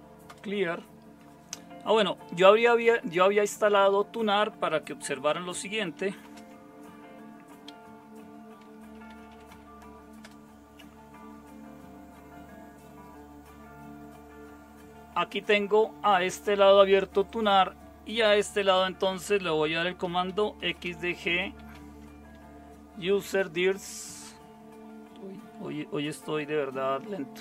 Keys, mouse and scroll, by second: 0.3 Return, 6.2 super+space, 8.8-10.0 typing, 10.2 Return, 19.8-22.3 typing.